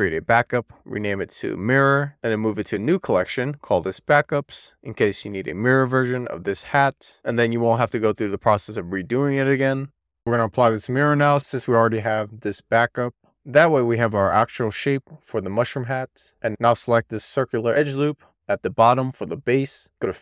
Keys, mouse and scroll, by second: 1.3 shift+r, 2.5 m, 9.6 click, 10.1 Tab, 10.9 a, 13.3 a, 14.5 click, 15.2 middle click, 16.6 alt+shift+click, 17.4 middle click, 19.0-20.2 drag.